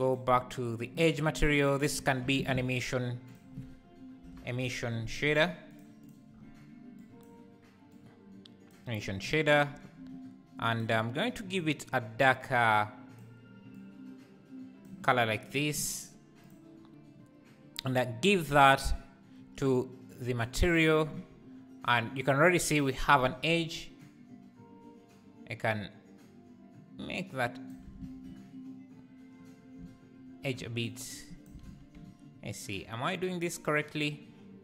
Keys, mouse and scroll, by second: 1.9 click, 2.0 x, 2.4 shift+a, 8.7 click, 10.8 click, 16.5 click, 18.6-27.0 drag, 27.9 ctrl+z, 31.4 shift+click, 31.6 ctrl+z, 32.0 `.